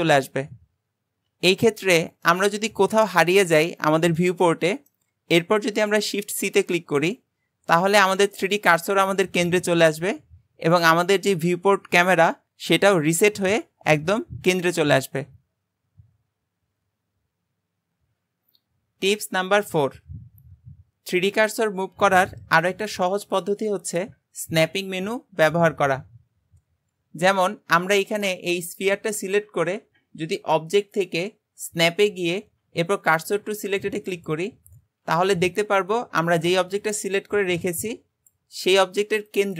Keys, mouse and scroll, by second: 1.8 scroll down 2, 2.3-6.5 shift+middle drag, 6.5 shift+c, 8.0-12.1 scroll up 2, 27.8 click, 28.2-30.4 shift+middle drag, 30.4-33.6 drag.